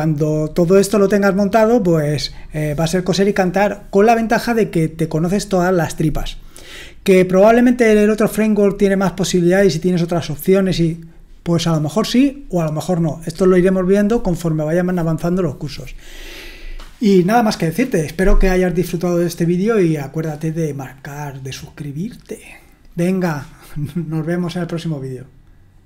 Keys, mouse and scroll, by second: 25.7 click.